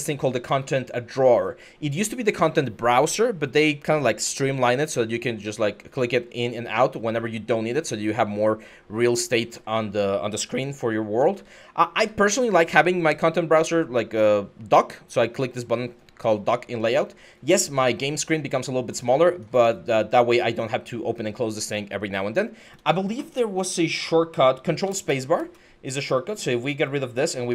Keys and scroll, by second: 10.8 w, 12.2 typing, 18.3-19.1 typing, 24.8 ctrl+space, 25.2 ctrl+space, 27.4 ctrl+space.